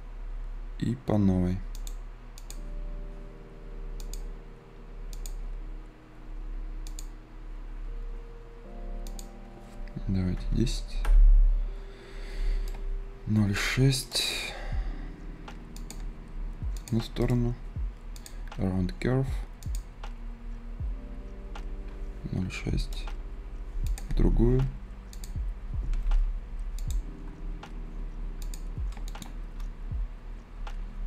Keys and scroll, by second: 10.1 a, 10.9 Return.